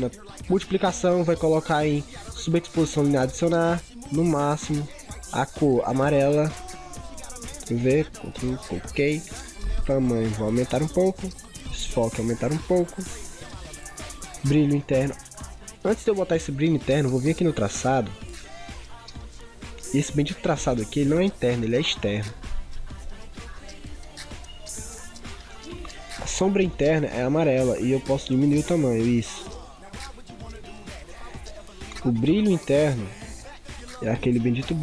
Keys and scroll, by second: 7.5 ctrl+v.